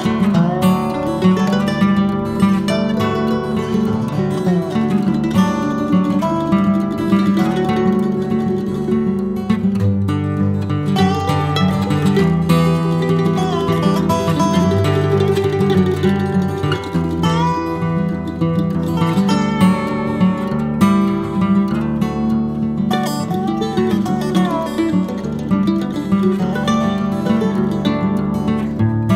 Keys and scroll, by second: 5.7 ctrl+b, 13.5 ctrl+b, 19.7 x, 24.2 e, 26.6 KP_1, 28.7 e.